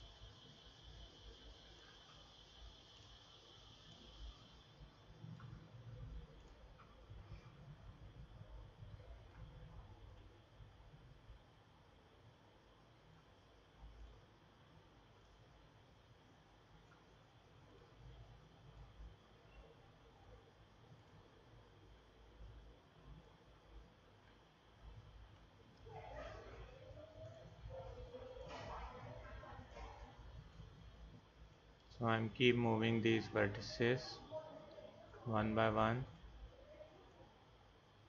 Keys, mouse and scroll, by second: 3.0-4.7 drag, 15.9-17.1 drag, 17.7 click, 27.2-30.3 drag, 33.1-34.4 drag, 36.1-37.2 drag.